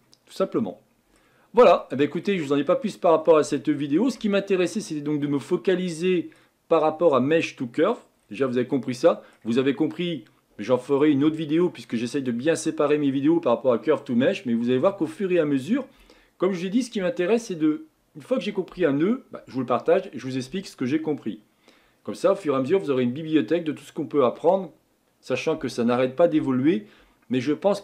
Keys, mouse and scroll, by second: 2.4 scroll down 1, 2.7-3.0 scroll up 2, 3.0-3.6 scroll down 2, 3.6 shift+middle click, 4.2-5.6 scroll up 1, 5.6-27.8 scroll up 1.